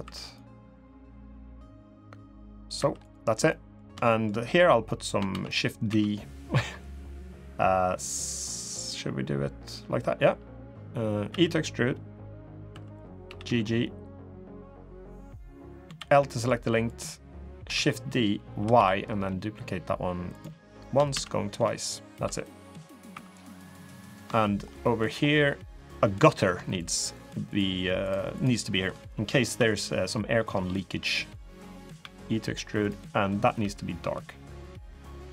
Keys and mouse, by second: 0.0 click, 0.8-2.5 drag, 2.5 3, 2.8 click, 3.2 middle click, 3.8 shift+middle click, 4.6 middle click, 5.1 shift+d, 5.6 s, 11.1 e, 12.5 2, 12.7 click, 13.0 g, 15.1 click, 15.6 l, 16.0 click, 16.7 click, 17.5 shift+d, 20.9 shift+r, 21.6 middle click, 22.0 3, 22.9 3, 23.7 click, 24.1 shift+middle click, 24.6 middle click, 25.6 click, 26.1 click, 26.5 shift+click, 26.9 shift+click, 27.2 shift+click, 27.8 shift+click, 28.1 shift+click, 29.3 i, 31.8 e, 33.4 g, 35.0 click.